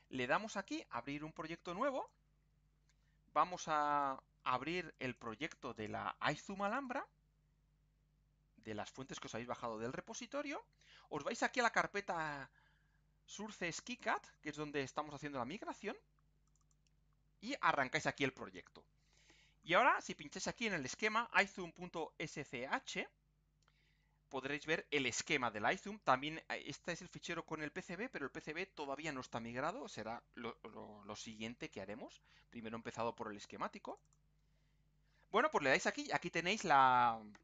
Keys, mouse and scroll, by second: 0.2 click, 2.0 click, 3.7 click, 4.9 click, 6.7 click, 14.0 click, 16.4 click, 33.9 click.